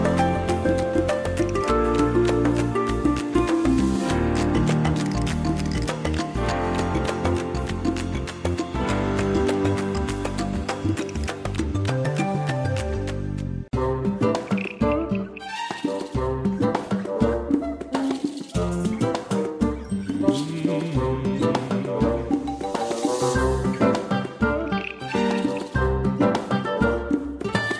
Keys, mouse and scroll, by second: 1.8 click, 2.5 scroll down 1, 3.4 ctrl+scroll up 1, 5.4 shift+click, 5.9 scroll down 1, 7.4 click, 9.9 ctrl+scroll up 1, 10.8 click, 12.4 shift+click, 18.0 ctrl+scroll down 1, 19.0 click, 25.5 click, 25.9 ctrl+scroll up 1, 26.8 ctrl+scroll down 1, 27.3 space.